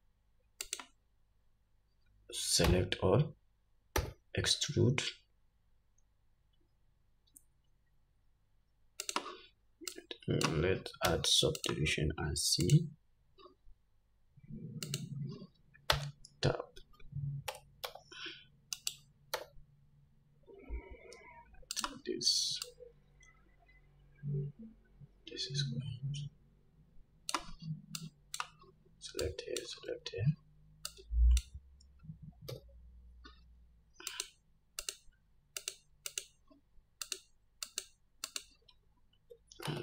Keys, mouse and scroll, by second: 2.9 a, 4.3 e, 10.3-22.1 drag, 11.4 Tab, 16.2 Tab, 17.8 g, 19.7 e, 22.9-34.6 drag, 32.8 2, 35.1 shift+click, 35.9 click, 36.4 shift+click, 37.4-38.7 shift+drag.